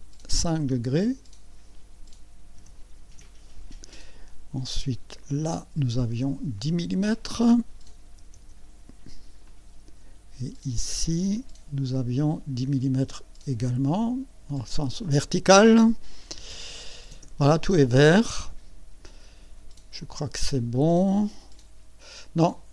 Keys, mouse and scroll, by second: 0.6 click, 2.6 KP_5, 3.1 KP_Enter, 5.2 click, 6.5 click, 8.1 KP_1, 8.3 KP_0, 9.4 click, 11.3 click, 13.0 click, 14.9 click, 16.3 KP_1, 16.5 KP_0, 20.5 click.